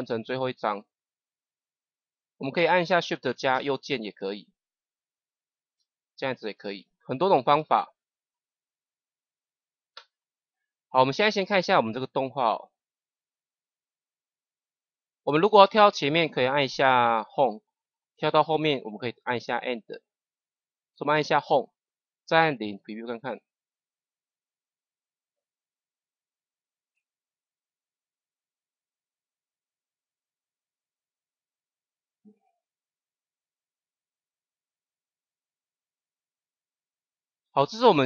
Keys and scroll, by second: 3.4 shift+Right, 6.5 Right, 17.3 Home, 19.5 End, 20.0 Insert, 20.4 End, 21.1 Home, 22.6 KP_0.